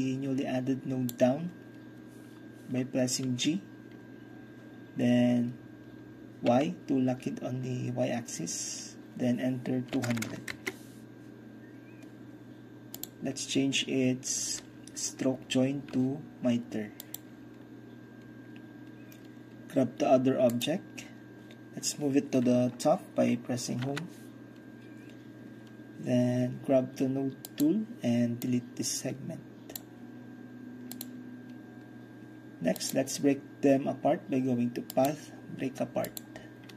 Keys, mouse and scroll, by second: 3.3 g, 6.5 y, 10.0 KP_2, 10.1 KP_0, 10.3 KP_0, 10.6 Return, 13.0-14.9 drag, 17.1-18.9 drag, 20.6-23.9 drag, 23.9 Home, 27.5-33.9 drag, 35.0 click, 36.1 click.